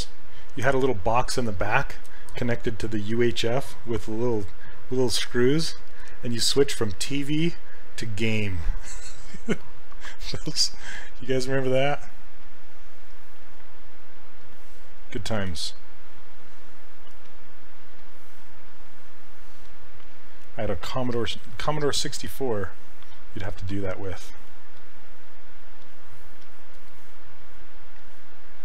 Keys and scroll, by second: 11.4 s, 15.5 ctrl+z.